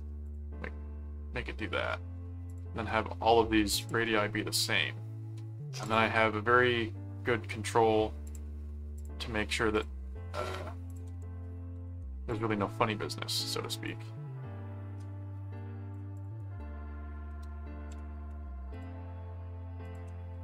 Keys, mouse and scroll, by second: 0.2 click, 2.5 click, 3.8 ctrl+click, 4.5 ctrl+alt+click, 5.2 alt+a, 5.8 click, 8.2 ctrl+click, 8.9 ctrl+click, 9.7 ctrl+click, 10.9 ctrl+click, 11.7 alt+q, 12.3 click, 13.8-15.9 drag, 16.1 click, 16.3 right click, 18.7 ctrl+click, 19.8 ctrl+click.